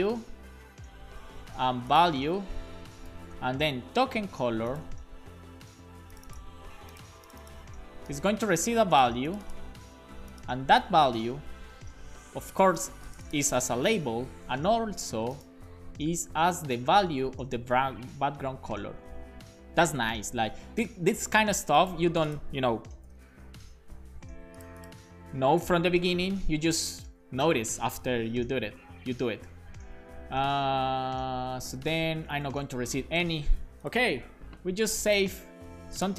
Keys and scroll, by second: 2.4 shift+super+Left, 3.1 BackSpace, 3.3 super+s, 11.0 alt+shift+Left, 11.2 alt+shift+Left, 11.8 BackSpace, 11.9 super+s, 16.2 super+Right, 16.5 Left, 16.6 Left, 16.8 Left, 17.1 Left, 18.7-21.0 typing, 26.1 super+Left, 26.6 Up, 31.7 Up, 32.0 super+Right, 32.3 shift+super+Left, 32.7 BackSpace, 32.9 super+s.